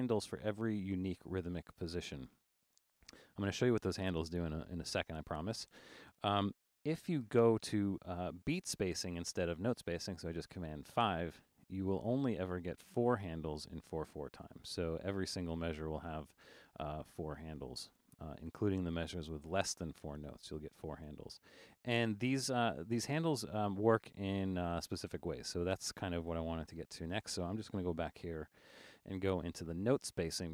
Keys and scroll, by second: 5.1 super+a, 6.9 super+5, 25.7 super+a, 26.8 super+4, 28.1 super+u.